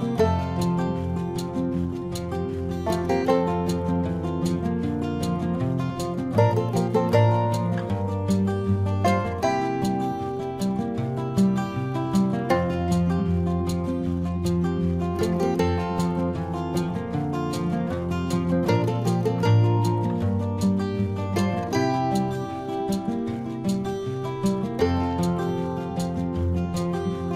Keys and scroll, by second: 4.8 space, 24.1 space.